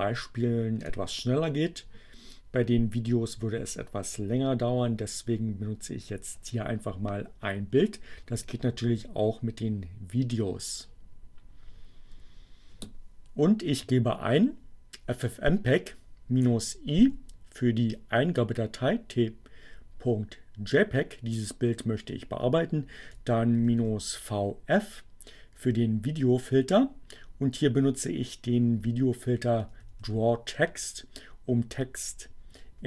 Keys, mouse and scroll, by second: 12.3 Left, 16.9 Right, 22.1 Right, 27.3 Right.